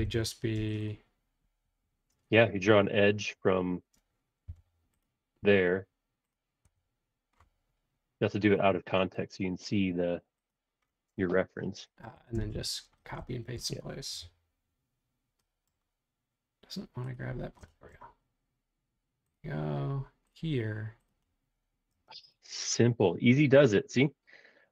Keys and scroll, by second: 0.5 space, 4.6 l, 5.5 Escape, 6.6 Escape, 12.1 Escape, 12.3 typing, 14.1 l, 21.9 space.